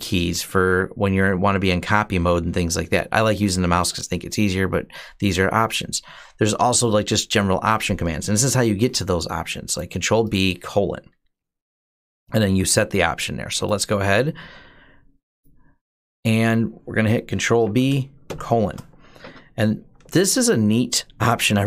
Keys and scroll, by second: 17.5 ctrl+b, 18.1 :, 21.5-21.6 typing.